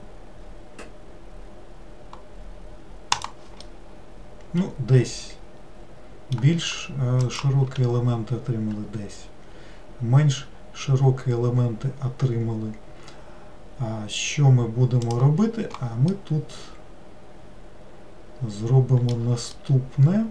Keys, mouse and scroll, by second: 3.7-6.6 middle drag, 16.2-19.2 middle drag, 19.6-20.3 shift+middle drag.